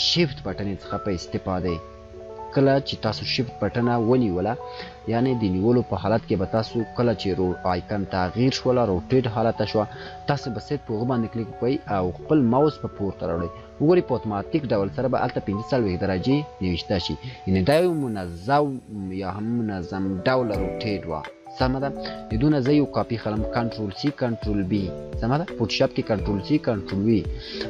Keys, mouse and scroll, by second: 0.0 click, 8.8-11.0 shift+click, 17.6 scroll up 1, 21.2 scroll up 1, 24.8 click.